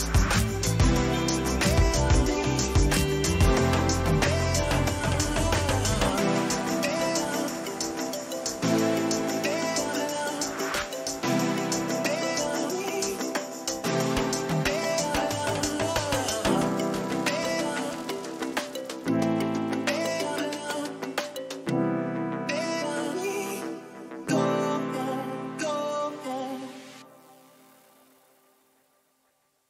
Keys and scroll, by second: 10.5 Return, 13.7 ctrl+j.